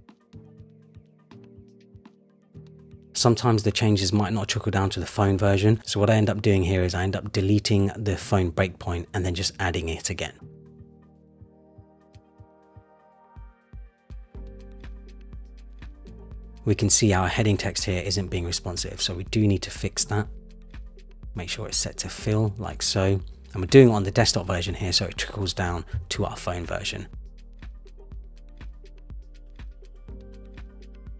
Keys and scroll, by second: 13.9 super+=, 26.4 Return.